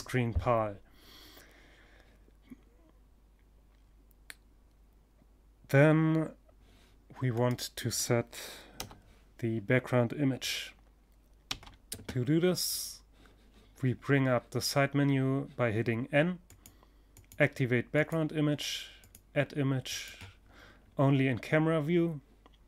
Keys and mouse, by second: 5.8-7.7 right drag, 7.2 KP_0, 10.0 n, 14.9-19.3 drag, 19.3-22.4 middle drag, 22.6 click.